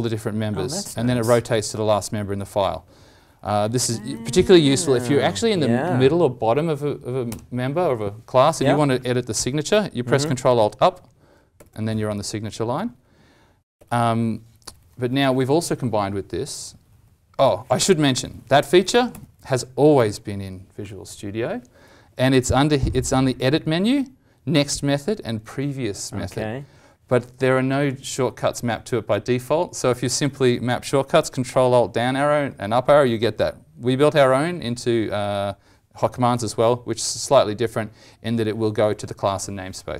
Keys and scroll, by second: 0.8 ctrl+alt+Down, 1.5 ctrl+alt+Up, 2.3 ctrl+alt+Up, 10.5 ctrl+alt+Up, 19.1 alt+e.